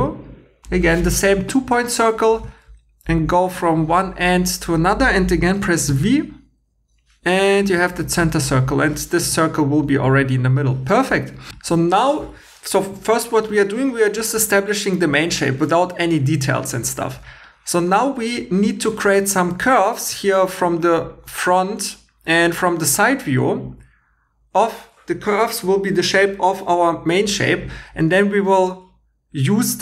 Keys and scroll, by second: 5.9 v, 11.5 2.